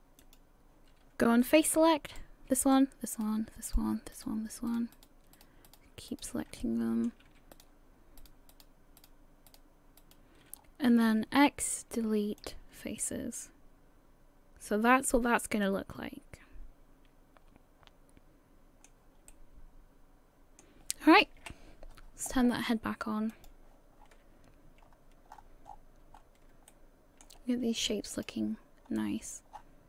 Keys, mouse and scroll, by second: 0.2 click, 2.1 right click, 2.6 shift+right click, 3.1 shift+right click, 3.7 right click, 4.1 shift+right click, 4.7 shift+right click, 5.1 shift+right click, 5.3 shift+right click, 5.7 shift+right click, 6.1 shift+right click, 6.6 shift+middle click, 7.5 shift+right click, 8.2 shift+right click, 8.5 shift+right click, 9.2 shift+right click, 9.5 shift+right click, 10.0 shift+right click, 10.6-11.4 scroll down 3, 11.4 x, 13.0 middle click, 19.3 middle click, 21.4 KP_1, 23.3 click, 24.0-24.5 scroll down 6, 24.8-26.3 scroll up 15, 26.8 shift+middle click, 28.1 click, 28.8 scroll down 2, 29.5 scroll down 7.